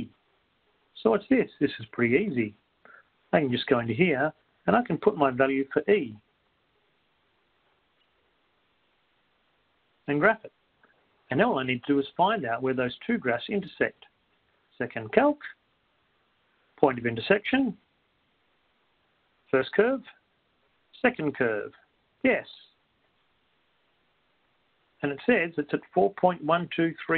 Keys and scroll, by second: 2.7 Up, 7.2 x, 8.7 1, 9.2 Right, 14.7 Down, 14.9-15.6 typing, 18.4 5, 20.2 Return.